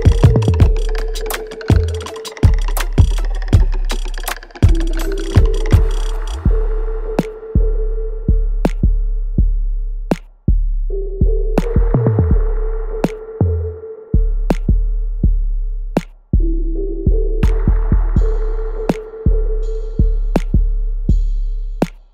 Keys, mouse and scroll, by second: 4.6 alt+right click, 5.0-8.5 alt+drag, 8.5 right click, 9.1 click, 9.4-13.3 alt+drag, 13.3 click, 17.0 alt+click, 17.7 alt+right click, 19.0 click, 20.2 alt+middle click, 20.9-22.1 alt+right drag.